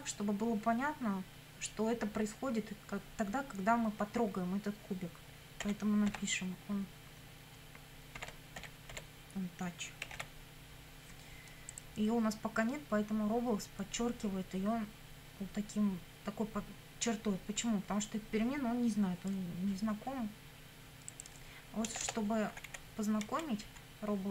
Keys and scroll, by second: 5.6 o, 6.1 n, 8.0-10.2 typing, 21.9 Return, 22.5 Up, 23.3 Down, 23.7 Up.